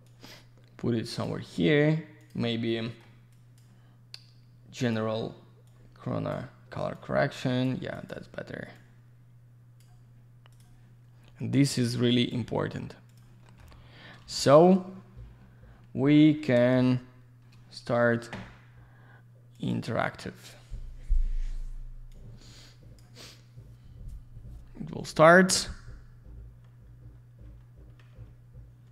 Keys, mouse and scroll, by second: 0.0 click, 2.2 click, 2.3 click, 2.7 middle click, 3.3 click, 4.8 click, 4.9 click, 5.6 click, 6.9 click, 7.9 click, 8.1 click, 8.7 click, 10.5 click, 10.6 click, 11.8 click, 13.1 click, 13.2 click, 13.4 middle click, 13.6 double middle click, 14.2 shift+f, 16.4 middle click, 16.7 shift+f, 19.5 click, 22.1 click.